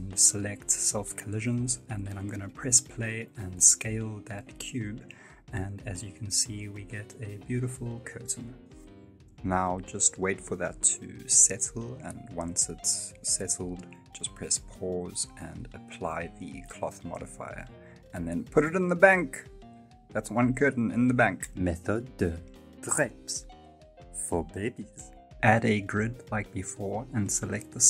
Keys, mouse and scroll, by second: 1.8 click, 1.8 scroll down 5, 3.2 space, 4.4 right click, 5.2 s, 8.0 middle click, 9.7 click, 10.2 click, 13.3 middle click, 13.3 space, 16.5 click, 16.5 scroll down 3, 17.0 g, 18.8 shift+right click, 19.0 g, 20.3-20.9 scroll up 2, 25.6 click, 25.6 scroll up 2, 26.0 shift+middle click, 26.2 Tab, 26.5 r, 26.8 shift+middle click, 26.9 scroll up 2, 26.9 Tab, 27.1 Tab, 27.1 scroll down 2, 27.1 2, 27.2 right click.